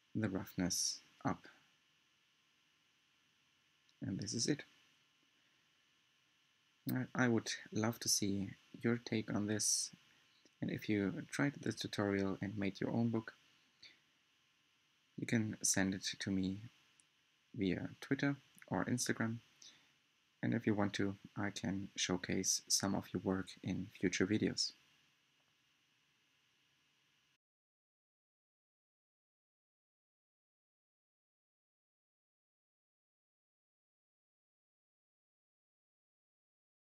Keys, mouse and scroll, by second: 0.0-5.5 middle drag, 5.5-6.2 scroll up 2, 6.2-8.1 shift+middle drag, 8.1-8.9 scroll up 4, 9.0 scroll down 3, 9.5-11.3 scroll up 5, 11.3-13.2 scroll down 3, 13.2-14.1 scroll down 5, 14.3-17.3 middle drag, 18.2-18.7 scroll up 2, 18.7-20.7 shift+middle drag, 20.7 scroll up 1, 21.4-24.0 middle drag, 24.0-24.9 scroll down 2, 24.9-28.0 middle drag, 31.4-36.8 shift+middle drag.